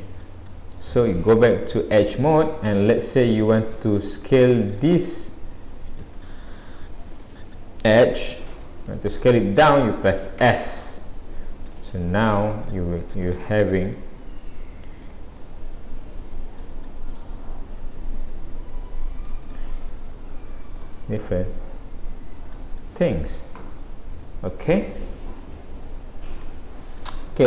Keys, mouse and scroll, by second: 2.0 click, 2.4-3.3 scroll up 3, 3.3 middle click, 4.3 click, 7.8-8.2 scroll up 1, 8.3 scroll down 1, 8.7 shift+middle click, 10.4 s, 12.4 click, 13.3 s, 16.3 middle click, 18.0 click, 19.8 scroll down 3, 20.2 middle click, 21.1 scroll down 1, 21.5 middle click, 23.8 middle click, 24.8 Tab, 25.3 middle click.